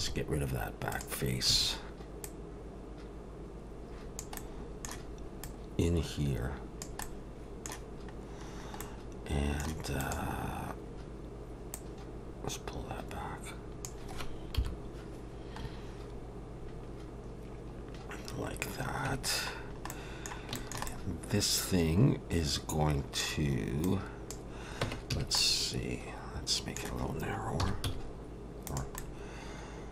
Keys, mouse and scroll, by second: 0.0 x, 1.5 a, 2.2 click, 4.4 middle click, 5.4 click, 7.0 middle click, 8.5 scroll up 2, 8.8 middle click, 10.0 click, 11.7 click, 14.6 KP_7, 15.7-17.7 scroll up 2, 18.2-18.7 scroll down 1, 19.1 Tab, 19.6-19.9 scroll down 1, 19.9 middle click, 20.5 shift+middle click, 20.9 middle click, 23.8 click, 24.8 Tab, 25.1 a, 25.4 middle click, 27.6 s, 29.0 middle click.